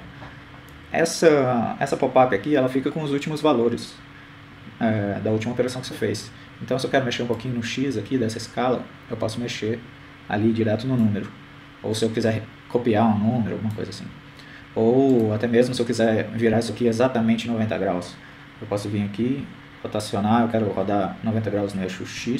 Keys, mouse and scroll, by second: 8.2-9.7 drag, 12.5-13.7 drag, 15.3 right click, 19.6 r.